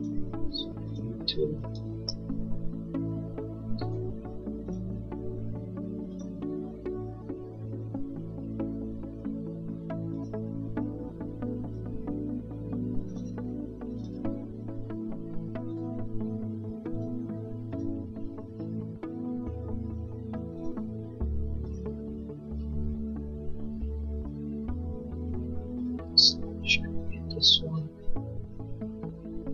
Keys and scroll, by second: 9.6 Escape.